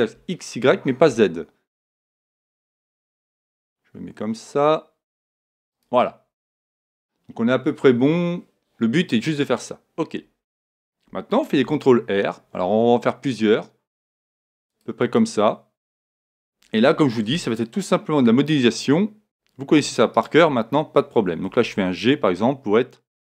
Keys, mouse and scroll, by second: 5.8-7.8 drag, 11.5 ctrl+r, 15.2-16.9 drag, 15.8-17.8 middle drag, 17.3 a, 20.1-22.1 right drag, 21.5 g.